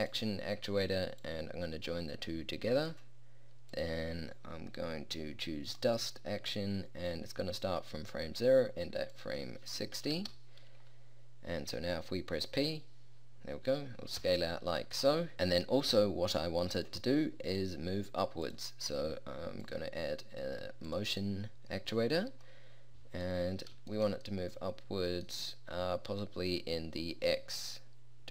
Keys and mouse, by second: 12.7 p, 14.3 p.